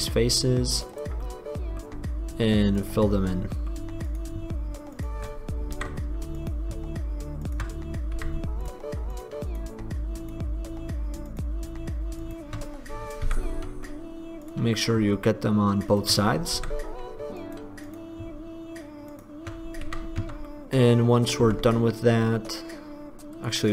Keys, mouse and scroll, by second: 0.2-0.5 drag, 1.4-3.0 middle drag, 3.0 right click, 3.3-6.6 drag, 5.9 f, 8.4 f, 13.4 f, 16.8 f, 20.4 Tab, 20.4 f, 21.6 Tab.